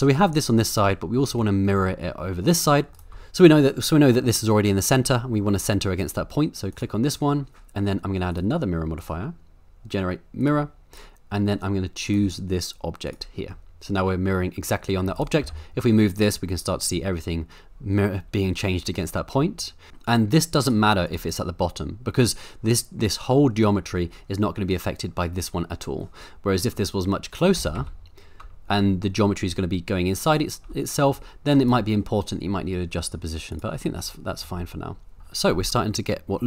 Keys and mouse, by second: 1.2 middle click, 2.9 shift+right click, 3.6 click, 4.3 middle click, 6.7 click, 8.3 click, 9.0-10.5 drag, 12.0 click, 13.5-15.0 middle drag, 15.1 click, 15.4 g, 19.5-19.9 middle drag, 27.6 g, 27.8 x, 31.6 click, 33.5 click, 33.8 middle click, 35.2 middle click, 35.9-36.4 shift+middle drag.